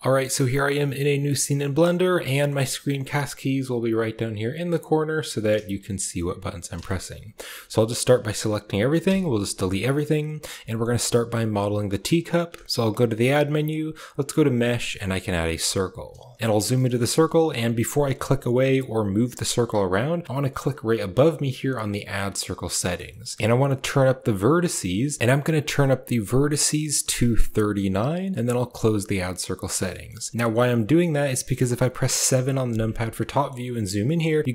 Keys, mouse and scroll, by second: 0.6 middle click, 1.1 shift+middle click, 2.0 middle drag, 4.5-5.3 middle drag, 5.6 g, 6.7 shift+click, 7.3 a, 7.5 a, 8.9 x, 10.5 shift+click, 11.2 shift+click, 12.6 shift+a, 16.3 KP_Decimal, 16.6 shift+click, 16.8 click, 20.7 click, 22.6 middle drag, 22.9 shift+middle click, 23.4 click, 23.5 click, 24.6 click, 25.6 click, 26.1-27.2 drag, 28.7 click, 29.2 middle click, 29.7 shift+middle click, 32.1 KP_7, 33.0-33.3 shift+middle drag, 33.9 shift+middle drag.